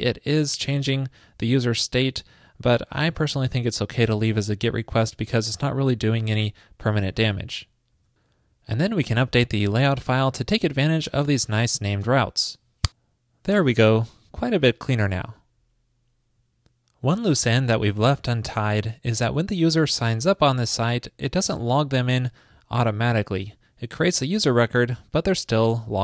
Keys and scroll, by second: 8.0 super+c, 8.0 super+s.